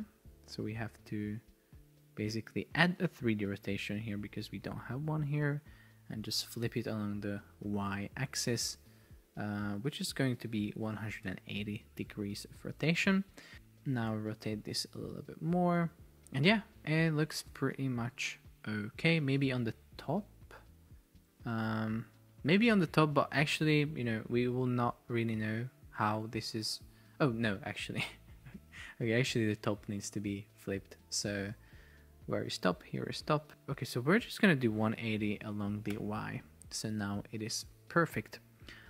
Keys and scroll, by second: 7.8 Return, 10.0 BackSpace, 11.2 Return, 14.4 shift+Down, 17.8 shift+Down, 18.6 shift+Down, 19.5 shift+Up, 20.6 shift+Left, 21.3 shift+Right, 22.9 shift+Down, 23.6 shift+Up, 26.4 shift+Down, 27.2 shift+Up, 36.0 Return.